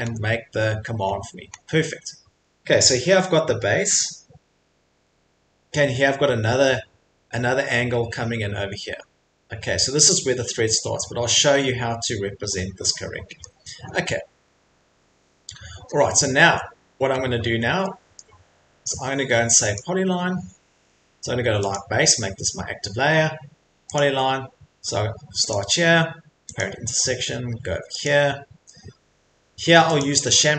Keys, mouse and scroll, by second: 0.0 Escape, 0.6 middle click, 0.6 middle click, 1.0 middle click, 1.1 middle click, 1.5 middle click, 1.6 middle click, 2.0 middle click, 2.0 middle click, 4.4 middle click, 5.0 middle click, 5.0 middle click, 6.2 middle click, 6.7 middle click, 6.8 middle click, 8.7 middle click, 8.9 middle click, 9.6 middle click, 12.1 middle click, 12.1 middle click, 13.4 middle click, 13.8 middle click, 13.8 middle click, 14.5 middle click, 14.5 middle click, 17.1 middle click, 17.2 middle click, 18.2 middle click, 19.7 click, 21.7 click, 24.0 click, 25.5 click, 26.6 click, 30.2 click.